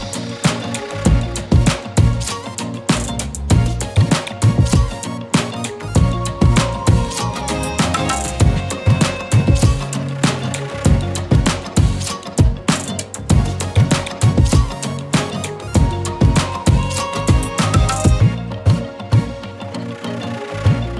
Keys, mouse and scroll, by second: 0.2 z, 0.3 click, 0.5-1.3 click, 0.7-1.1 z, 1.1 space, 1.3 click, 4.8 shift+click, 6.6-7.5 alt+shift+drag, 8.5 click, 13.8 scroll down 1, 15.1 click, 17.0 shift+click, 18.7-20.9 alt+shift+drag.